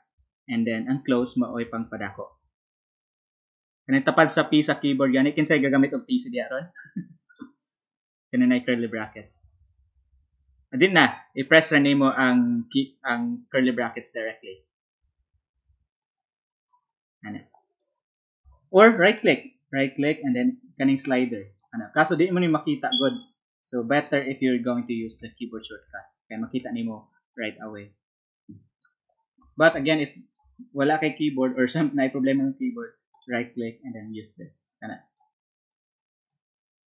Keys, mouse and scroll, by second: 15.9-17.7 drag, 18.4 click, 18.4 space, 19.1 right click, 20.3-21.5 drag, 23.9 click, 27.3-28.7 drag, 29.7 space, 29.8 click, 30.7-33.2 drag, 34.2-35.2 drag, 35.6-36.8 drag.